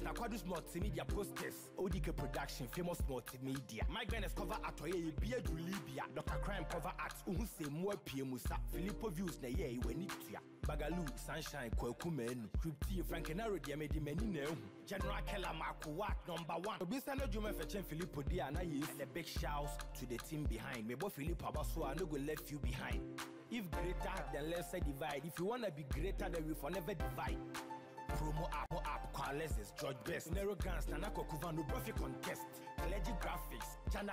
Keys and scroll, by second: 12.0 ctrl+t, 23.6 ctrl+t, 33.8 ctrl+Return.